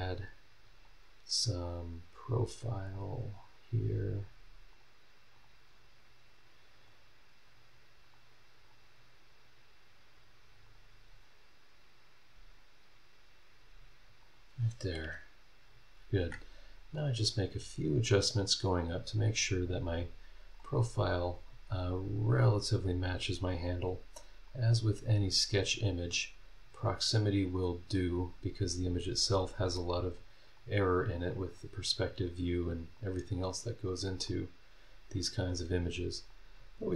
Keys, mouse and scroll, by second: 0.8 click, 1.6 click, 2.8 click, 3.2 scroll down 1, 3.6-4.0 scroll up 1, 4.7 click, 5.3 click, 5.7-6.0 scroll down 1, 6.3 scroll down 1, 6.8 scroll up 2, 8.0 click, 8.6 scroll down 2, 9.0-9.3 scroll up 2, 10.7 click, 12.5 click, 14.2 click, 15.0 Escape, 15.7 scroll down 2, 16.2 Escape, 16.5 scroll down 1, 16.9-17.8 scroll up 4, 19.4-20.7 drag, 20.8 scroll down 2, 21.2-21.5 scroll up 2, 22.4-23.6 drag, 24.5-25.8 drag, 26.1 scroll down 2, 26.4-26.7 scroll up 2, 27.5-28.9 drag, 29.8 click, 30.6 click, 31.5 scroll down 1, 32.1 scroll up 1, 32.9-34.4 drag, 35.6 click, 36.5 scroll down 1.